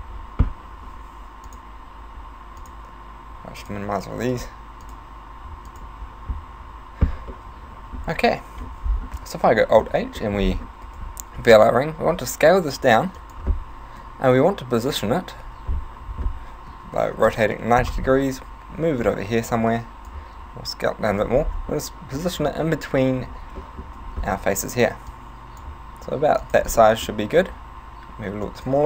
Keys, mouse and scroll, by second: 1.5 click, 2.7 click, 3.6 click, 4.3 click, 4.9 click, 5.7 click, 7.4 middle click, 8.7-9.3 scroll down 4, 9.5 alt+h, 9.9 a, 10.2 middle click, 10.4-10.9 scroll up 5, 10.9 right click, 12.1 s, 13.3 click, 14.0 KP_1, 15.6 z, 16.7 r, 19.1 click, 20.4 s, 21.3 click, 21.6-22.1 scroll up 4, 23.7 shift+middle click, 24.2-25.1 scroll up 1, 25.1 click, 25.9 s, 26.6 click, 26.8 middle click, 27.5 s, 28.7 click.